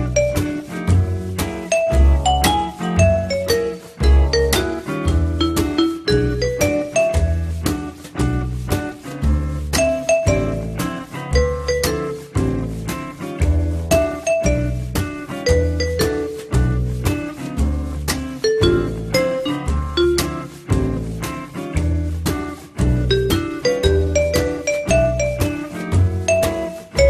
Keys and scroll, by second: 12.8 t, 13.5 z, 19.6 p.